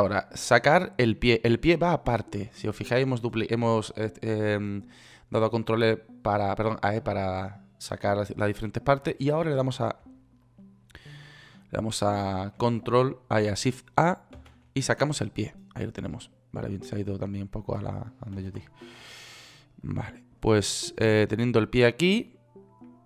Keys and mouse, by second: 14.7 shift+a, 18.7 ctrl+z, 21.1 middle click.